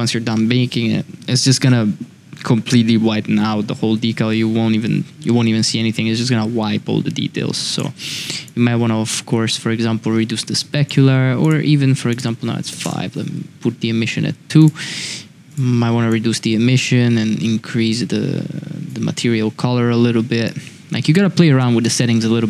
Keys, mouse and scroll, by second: 8.4-10.8 drag, 11.4 click, 12.1-13.7 drag, 14.6 click, 20.5 click.